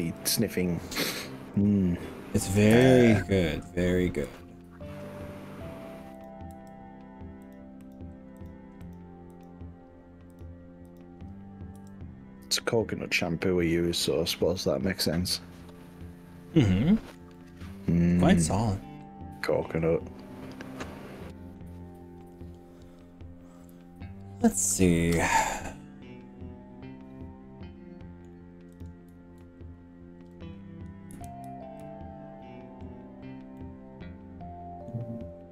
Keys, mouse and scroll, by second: 0.0 click, 0.2 g, 1.6 drag, 2.6 click, 2.8 g, 4.4 click, 6.2 click, 6.6 g, 7.6 click, 8.4 click, 9.4 click, 10.3 drag, 11.8 g, 13.4 scroll up 1, 14.6 click, 15.0-17.2 middle drag, 17.4-18.6 middle drag, 18.6-19.4 scroll down 4, 19.4-20.8 middle drag, 21.2 middle click, 22.1-28.3 middle drag, 28.8 drag, 29.6-30.0 scroll up 2, 31.2 KP_1, 31.5 KP_3, 32.8 scroll up 1, 33.4 scroll up 2, 33.6-35.0 middle drag.